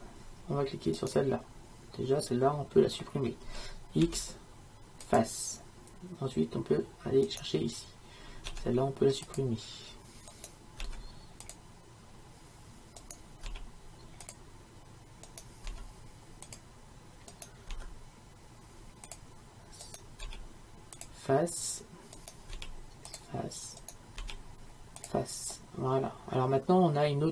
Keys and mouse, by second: 1.0-2.7 right drag, 4.1 x, 8.5 x, 10.9 x, 13.0-14.4 right drag, 15.3-16.6 right drag, 17.4-19.2 right drag, 19.9-21.9 right drag, 22.2-23.8 right drag.